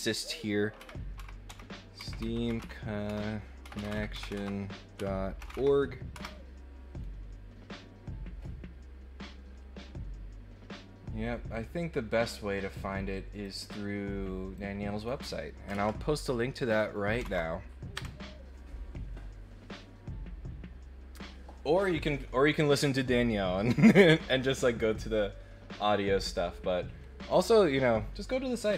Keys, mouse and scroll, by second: 13.4 click, 14.5 click, 16.7 click, 28.6 click.